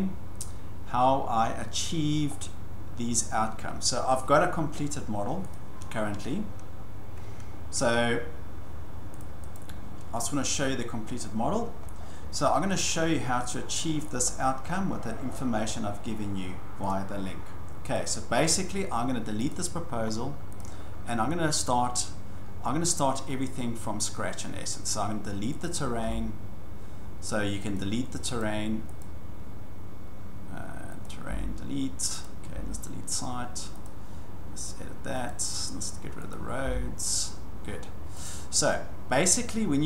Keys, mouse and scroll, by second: 5.5 click, 9.2 click, 9.5 click, 11.1-11.5 scroll down 5, 11.9 scroll down 1, 12.1 scroll up 10, 12.3 scroll, 14.1 shift+middle click, 14.3-15.2 scroll, 16.8 shift+middle click, 17.1 scroll, 17.9 click, 19.5 click, 19.8 scroll, 20.6 click, 21.6 click, 25.6 click, 26.0 Delete, 27.7 click, 28.4 click, 29.0 click, 31.0 click, 31.3 Delete, 32.2 click, 32.5 Delete, 33.8 click, 35.3 click, 36.3 click, 36.6 Delete, 38.2 click.